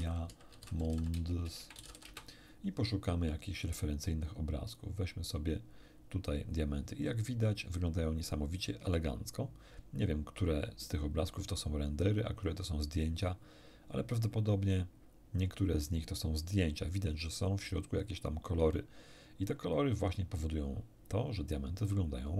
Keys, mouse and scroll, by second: 0.0-2.1 typing, 2.1 Return, 4.7 click, 8.8-9.5 scroll down 1, 9.7-10.1 scroll down 1, 10.4 scroll down 1, 11.2-11.5 scroll down 1, 12.5 scroll down 1, 14.1-15.7 scroll down 4, 15.9 scroll down 1, 19.2-19.6 scroll down 1, 21.1-21.5 scroll down 1.